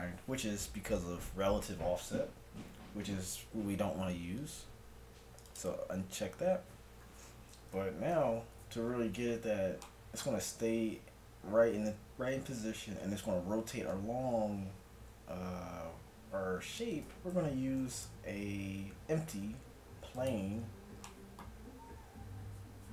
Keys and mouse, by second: 5.5-7.5 drag, 7.5 z, 8.1 KP_1, 17.8 shift+a.